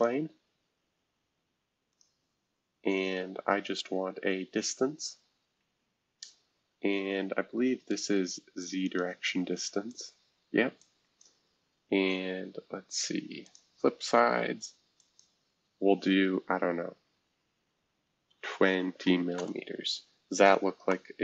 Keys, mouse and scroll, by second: 1.9-3.5 drag, 4.2-4.9 scroll down 2, 4.9-5.7 scroll down 1, 5.7-7.3 scroll down 1, 8.8 click, 9.5-12.7 drag, 13.4-16.7 drag, 17.6 typing, 18.8-19.5 typing.